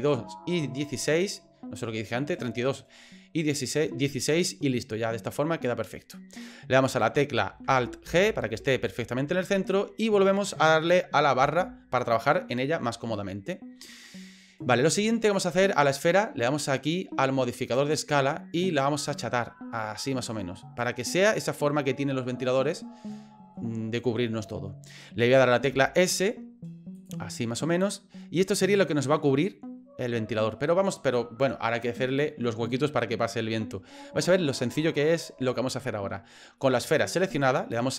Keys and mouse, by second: 6.8 right click, 8.0 alt+g, 11.4 KP_Divide, 13.1 middle click, 15.0 middle click, 17.9 click, 19.1-20.8 drag, 21.0 middle click, 22.5-23.5 middle drag, 25.7 s, 27.3-29.2 middle drag, 29.4-30.5 middle drag, 36.6 middle click.